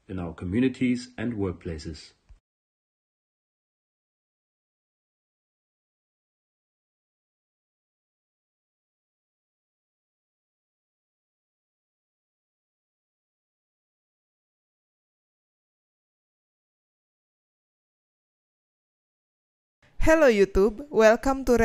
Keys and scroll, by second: 4.4 space, 16.2 b, 17.1 a, 17.6 BackSpace, 19.8 space.